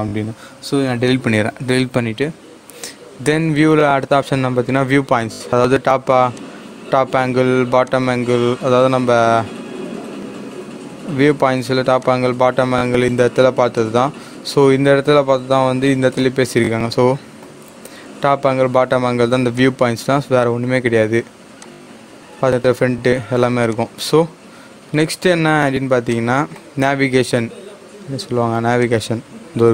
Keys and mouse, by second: 3.2 click, 6.3 click, 12.0 click, 16.1-19.5 drag, 19.5-21.5 drag, 24.0 click, 26.1-28.7 drag, 28.7 click.